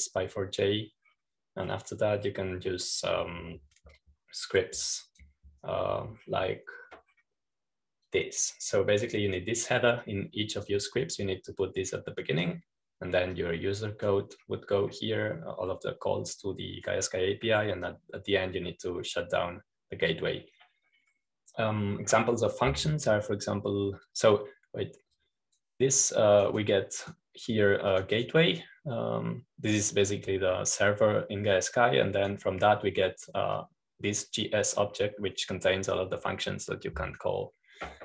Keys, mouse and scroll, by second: 3.4-4.0 scroll down 2, 4.0-5.6 scroll down 1, 6.3-7.9 drag, 8.1-8.6 scroll down 2, 8.6-10.0 scroll down 1, 10.0 click, 11.2 click, 11.9 click, 13.1-14.4 drag, 15.2 click, 19.8-21.2 drag, 22.8-24.9 scroll down 2, 27.1 click, 27.9 click, 28.4 click, 28.9 click, 29.8 click, 30.0 click, 33.4 click, 35.4 click.